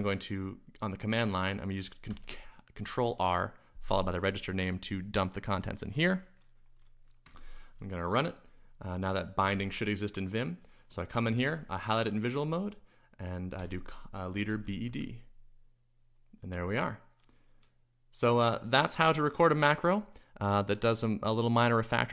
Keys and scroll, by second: 0.1-0.8 typing, 2.1 ctrl+r, 3.8 |, 7.2 Return, 9.2-10.0 typing, 11.2 shift+v, 13.6-15.3 typing.